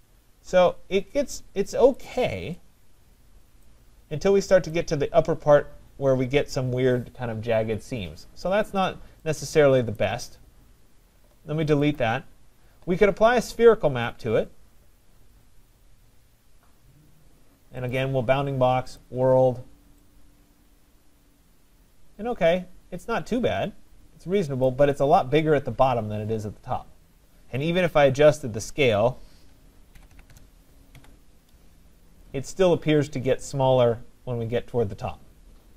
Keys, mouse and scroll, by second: 1.9 right click, 3.6 right click, 4.8 right click, 10.0 right click, 12.0 click, 14.2 click, 17.9 click, 19.0 click, 24.7 right click, 28.4 click, 29.0 click, 29.7-30.8 typing, 31.0 Tab.